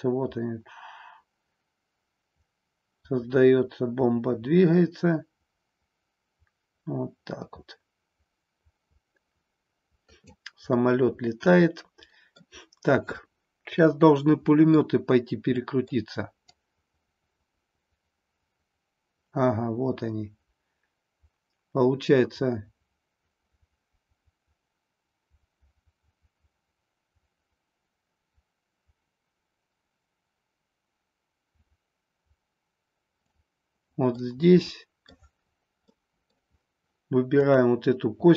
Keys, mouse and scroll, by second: 10.8-12.4 middle drag, 14.2 middle click, 15.6 middle click, 16.6-33.4 drag, 34.2-35.2 middle drag, 35.9 middle click, 37.3-38.3 drag.